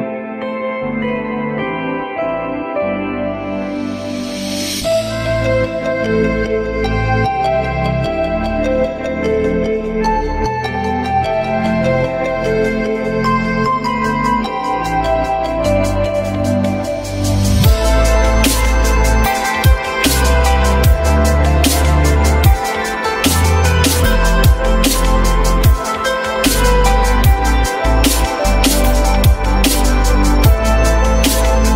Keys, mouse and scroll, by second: 8.5 3, 10.4 alt+middle click, 11.0 alt+scroll up 1, 11.9 shift+click, 16.3 alt+scroll up 1, 16.5 alt+middle click, 21.8 ctrl+click, 22.4 ctrl+click, 22.5 ctrl+double click, 22.9 ctrl+click, 23.7 ctrl+click.